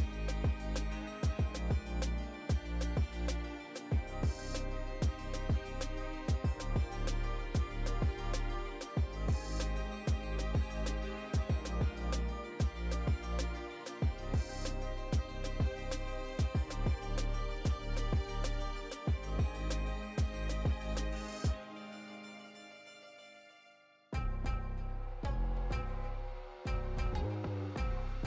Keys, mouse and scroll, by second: 0.1 middle click, 0.6 right click, 1.0 right click, 1.9-2.7 drag, 2.8 right click, 3.9 shift+right click, 5.7-6.7 drag, 7.3 right click, 8.2 g, 9.8 right click, 10.3 g, 11.5-12.0 scroll up 2, 12.0 middle drag, 12.4-12.8 scroll down 1, 14.0 right click, 14.4 g, 15.9 middle click, 16.6 right click, 16.9 g, 18.1 middle click, 18.7 right click, 19.0 g, 22.4 right click, 22.9 middle click, 23.3 r, 24.9-25.5 drag, 25.8 click, 25.8 right click, 27.9 right click.